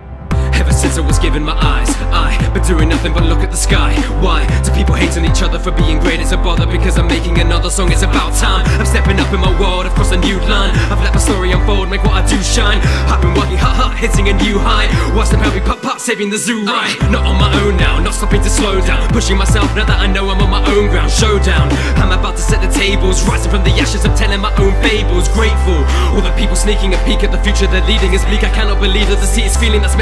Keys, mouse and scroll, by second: 19.3-20.3 scroll down 2, 20.3 a, 20.9 x, 24.4-26.9 drag, 28.3-29.6 drag.